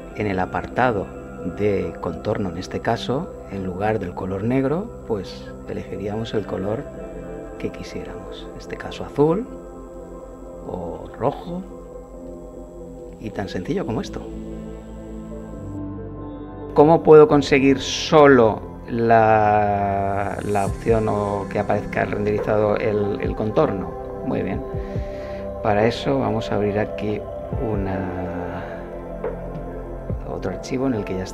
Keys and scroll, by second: 15.7 F12.